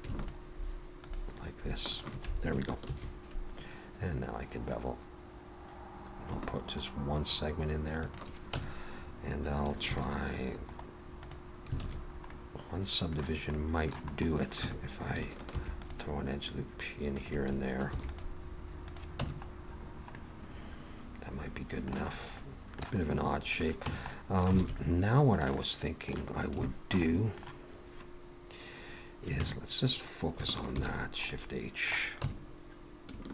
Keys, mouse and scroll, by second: 0.2 alt+shift+click, 2.9 ctrl+b, 8.6 Tab, 9.9 ctrl+1, 10.7 right click, 11.8 alt+a, 11.9-12.8 scroll down 3, 12.3 middle click, 13.6 middle click, 14.1 scroll up 2, 14.6 Tab, 15.5 ctrl+r, 17.9 ctrl+r, 19.2 Tab, 19.4-20.2 scroll down 2, 20.2 middle click, 20.2-21.4 scroll down 1, 22.1 scroll up 1, 22.4 middle click, 22.9-23.5 scroll up 2, 23.5 click, 23.9 Tab, 24.1 middle click, 24.6 alt+a, 24.8 middle click, 25.6 middle click, 26.6 shift+middle click, 27.1 middle click, 29.4 Tab, 30.7 shift+h, 31.3 middle click, 32.2 Tab.